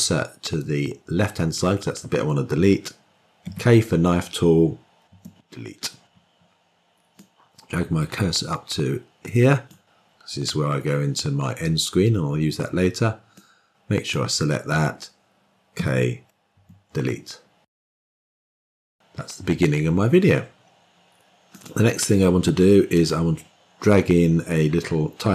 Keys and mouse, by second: 3.4 k, 7.1-9.6 drag, 13.2-14.1 drag, 15.7 k.